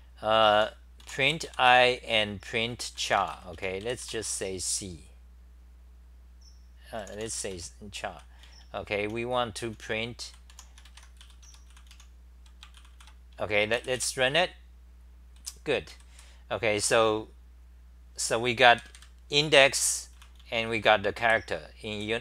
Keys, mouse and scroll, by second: 0.5 e, 1.0 u, 3.5 Home, 3.6-4.5 typing, 7.5 Home, 8.1-12.4 typing, 12.9 ctrl+c, 15.4 w, 15.9 d, 18.6 super+=, 19.4-22.2 typing.